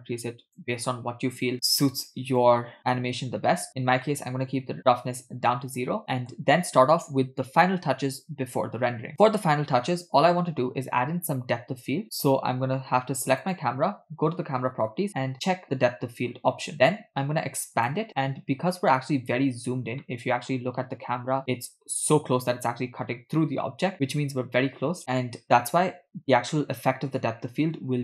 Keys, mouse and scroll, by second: 2.4 click, 4.1 scroll up 3, 4.1 middle click, 5.5-6.0 scroll down 2, 6.0 middle click, 13.4 click, 15.4 click, 17.8 click, 20.2 middle click, 20.8-21.9 scroll down 3, 21.4-21.9 middle drag, 23.5-23.9 middle drag, 25.0 KP_0, 25.4-25.9 scroll down 3.